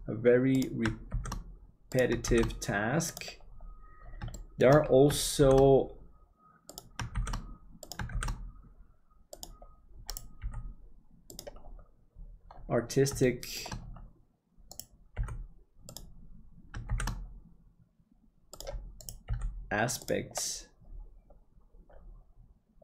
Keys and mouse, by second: 4.4 middle click, 5.4 shift+d, 10.4 g, 13.3 shift+middle click, 15.1 g, 16.9 shift+d, 19.2 g.